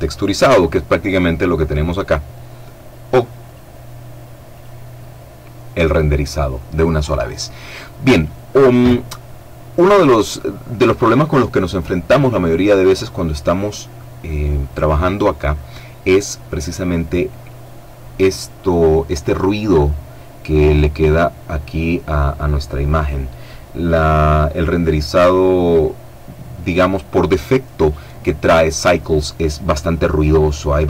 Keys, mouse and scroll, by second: 2.7 click, 3.7 click.